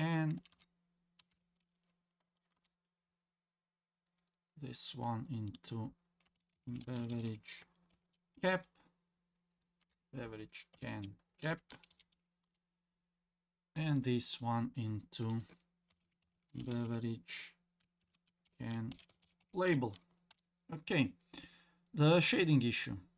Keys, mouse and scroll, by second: 0.5 BackSpace, 4.3 click, 5.5 F2, 14.0 click, 15.2 F2, 21.4 scroll down 1, 21.5 middle click.